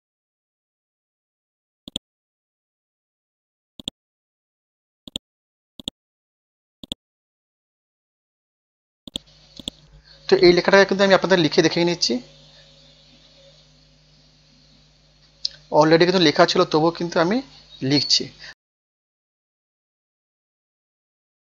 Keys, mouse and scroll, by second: 1.8 click, 3.1 ctrl+z, 3.8 click, 4.5 scroll down 1, 5.1 click, 6.3-6.6 scroll up 1, 6.8 click, 7.2-9.1 scroll up 1, 9.1 click, 10.3 F5, 10.9-20.2 typing, 15.6 Return, 21.2-21.4 typing.